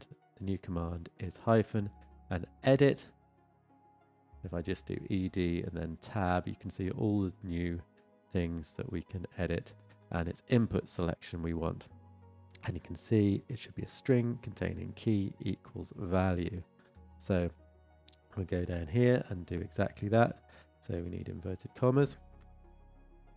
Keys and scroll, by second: 6.1 Tab.